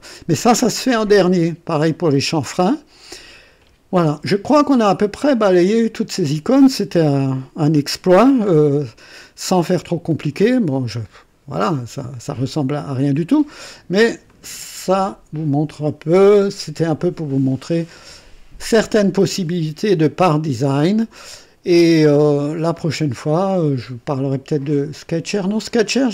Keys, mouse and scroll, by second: 6.6-8.1 scroll down 2, 8.1-8.6 scroll down 2, 9.4 right click, 10.3-13.3 drag, 13.5 scroll up 2, 14.3-15.1 right drag.